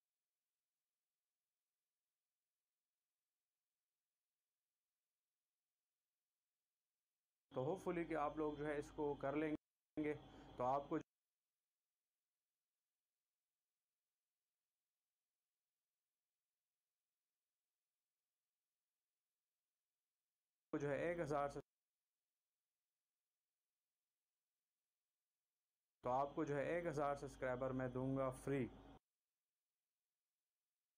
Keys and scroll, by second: 1.6 v, 3.3 ctrl+s, 5.4 shift+Delete, 7.9 space, 9.9 space, 13.0 c, 18.9 v, 20.6 Delete, 21.1 space, 22.5 ctrl+z, 25.9 shift+Delete, 26.4 space, 29.3 space, 30.2 c.